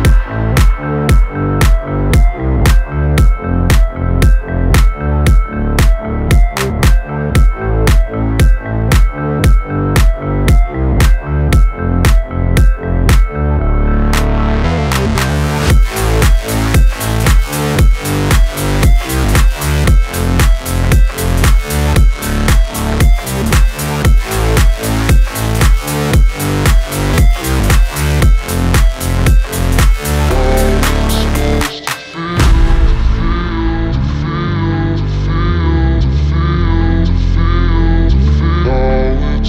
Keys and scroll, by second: 7.3 Return, 28.2-29.1 typing, 35.6 Return.